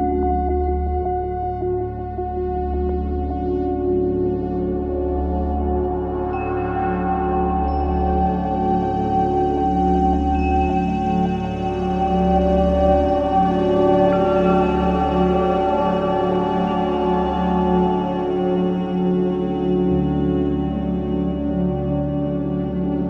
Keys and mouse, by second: 6.0-7.0 drag, 8.1 click, 9.2-10.7 drag, 10.8 ctrl+c, 11.2 Escape, 12.6-13.8 drag, 14.1 Return, 15.0 Return, 15.4-19.6 typing, 18.3 Return, 22.7 click.